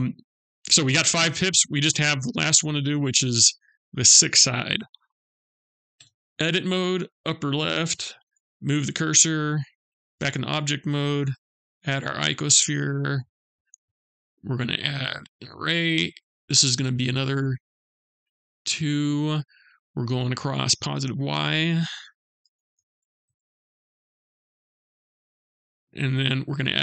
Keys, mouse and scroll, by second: 0.8 middle click, 3.8 click, 5.4 Tab, 6.4 click, 7.8 shift+s, 9.6 Tab, 10.6 shift+a, 15.0 click, 20.7 click, 25.8 click.